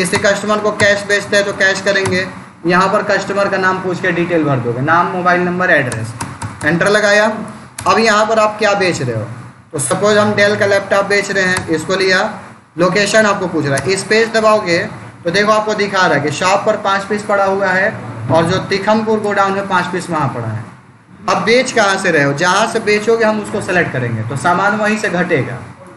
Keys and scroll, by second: 0.0 Return, 5.7 Return, 7.6 space, 8.2 Down, 9.3 Up, 11.4 Return, 13.6 space, 22.2 Down.